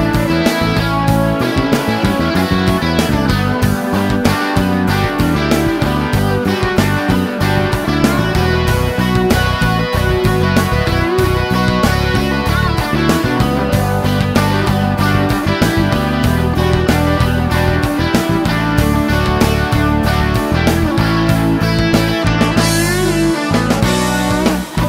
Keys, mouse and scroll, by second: 0.9-2.8 drag, 3.9 click, 4.5 click, 5.4 click, 6.7 a, 8.0-9.4 typing, 9.6 Return, 15.6 click, 16.6-16.9 scroll down 1, 19.7 click, 23.1 click, 23.7 click.